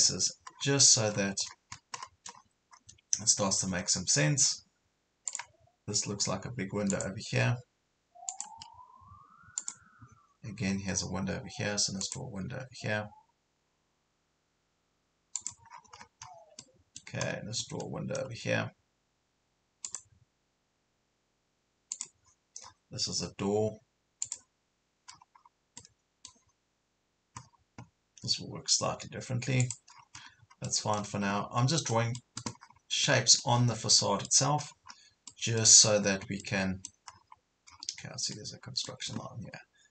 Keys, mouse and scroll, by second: 0.5 scroll up 1, 1.1 scroll down 1, 2.0 scroll up 1, 3.9 scroll down 1, 5.3-7.9 drag, 13.6 scroll up 1, 15.4 click, 15.7 scroll down 1, 16.6 middle click, 17.3 scroll up 1, 17.8 middle click, 19.9 click, 22.6 scroll up 1, 24.3 click, 25.1 scroll down 1, 25.8-27.0 middle drag, 27.4 scroll up 1, 29.6 click, 29.9 scroll down 1, 30.7 middle click, 31.4 scroll down 1, 31.9 middle click, 32.6 scroll up 1, 33.1 middle click, 33.9 scroll up 1, 34.0 middle click, 34.7 scroll down 1, 35.3 middle click, 35.9 scroll up 1, 36.4 middle click, 37.1 scroll up 1, 37.7 scroll down 1, 38.3 middle click, 39.2 scroll up 1.